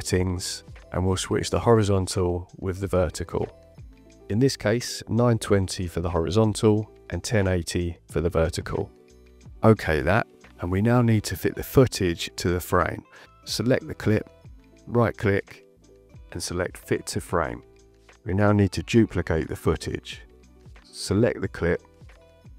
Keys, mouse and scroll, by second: 2.5 KP_1, 3.6 KP_2, 3.7 KP_0, 5.1 Tab, 6.7 KP_1, 6.8 KP_0, 7.5 KP_8, 7.6 KP_0, 10.6 click, 11.8 click, 14.9 right click, 18.1 click, 20.3 click.